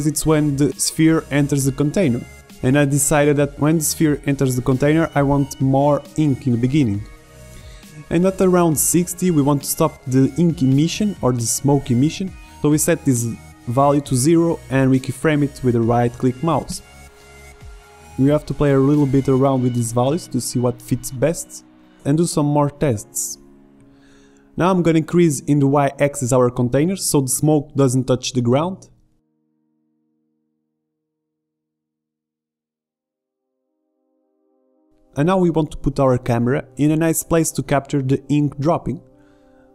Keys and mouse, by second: 2.9-4.6 drag, 8.4-10.4 drag, 12.3-13.8 drag, 13.8 middle click, 14.4-15.9 drag, 19.0-21.0 drag, 24.4 click, 25.6 click, 27.0-29.2 drag, 29.2 s, 31.0-32.4 drag, 32.7 click, 37.2-38.5 middle drag.